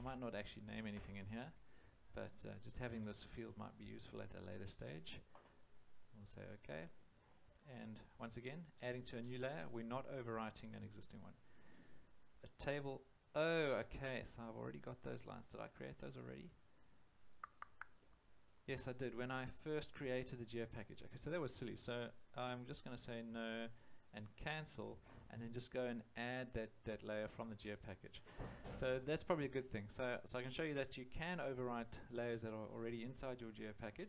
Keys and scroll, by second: 0.0-0.9 typing, 2.9 5, 4.0 0.